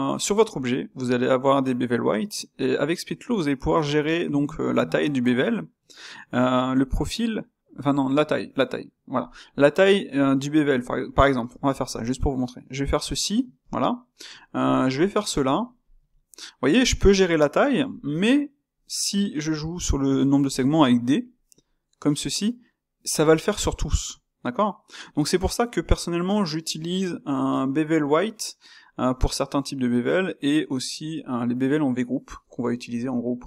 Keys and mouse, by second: 11.7 space, 14.3 Tab, 14.6 click, 15.8 space.